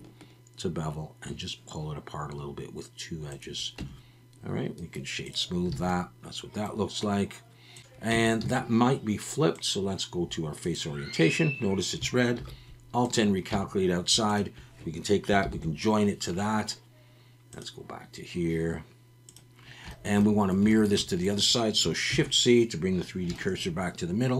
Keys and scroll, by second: 3.8 Tab, 5.8 alt+a, 8.1 Tab, 8.4 a, 12.4 alt+n, 13.5 Tab, 15.4 ctrl+j, 22.1 shift+c.